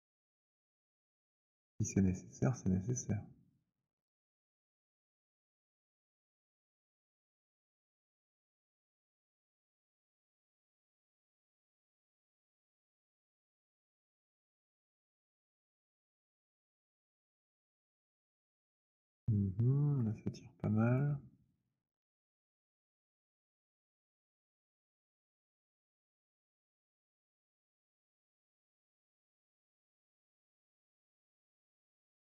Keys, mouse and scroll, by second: 2.2 click, 4.0 right click, 4.4 z, 6.4 right click, 8.1 click, 11.7 click, 11.9 alt+click, 15.3 click, 20.8 click, 22.8 right click, 24.0 click, 25.7 click, 28.2 click, 31.2 click.